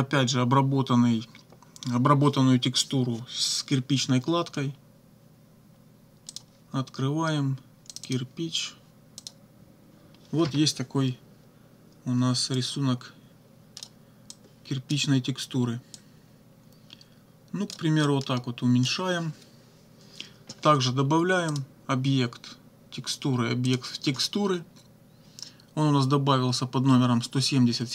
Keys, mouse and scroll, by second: 6.4 click, 8.0 click, 9.2 click, 12.6-14.0 drag, 14.4 click, 16.0-18.0 drag, 18.1 click, 21.5 click, 23.7 click.